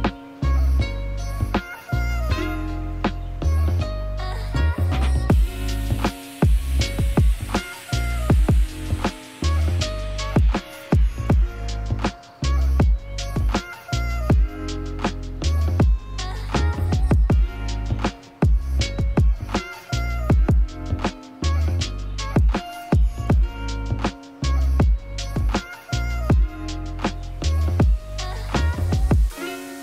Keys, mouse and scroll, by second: 2.1 click, 3.2-6.5 drag, 4.1 BackSpace, 13.8-14.5 drag, 15.4 click, 16.2 click, 16.8 click, 17.8 click, 19.2 click, 19.9 click, 20.7 click, 21.8 click, 22.7 click, 23.3 click, 24.6-26.0 drag, 26.1 click, 27.1 click, 27.4 click, 27.8 click, 28.6-29.6 drag, 29.7 click.